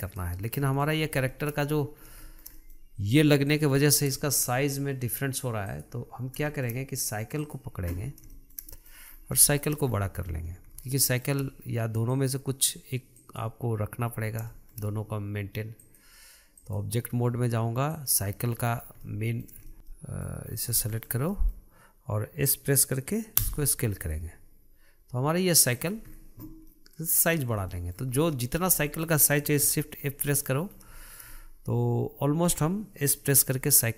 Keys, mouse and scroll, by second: 0.8-1.2 middle drag, 1.2-1.5 scroll down 1, 1.5 shift+middle click, 1.9-2.4 scroll up 7, 2.4-3.7 shift+middle drag, 3.7 click, 4.1-4.4 scroll down 2, 4.4-5.8 shift+middle drag, 5.8 click, 6.4 scroll down 2, 6.7 shift+middle click, 7.6 click, 8.5-9.2 shift+middle drag, 9.2-9.6 scroll up 2, 9.6-10.0 shift+middle drag, 10.0-11.2 scroll up 5, 11.2-12.3 shift+middle drag, 12.3 click, 13.3 click, 14.2-14.7 scroll down 1, 14.7-16.0 shift+middle drag, 16.0-18.2 drag, 18.6-19.2 scroll down 5, 19.2-20.7 middle drag, 20.7-21.1 scroll up 3, 21.1-23.7 shift+middle drag, 23.7 s, 26.3-27.0 scroll down 2, 27.0-28.9 middle drag, 28.9 scroll up 1, 29.1-29.9 shift+middle drag, 29.9 shift+z, 30.3 scroll down 2, 30.5 middle click, 31.0 scroll up 1, 31.2-33.6 shift+middle drag, 33.6 s.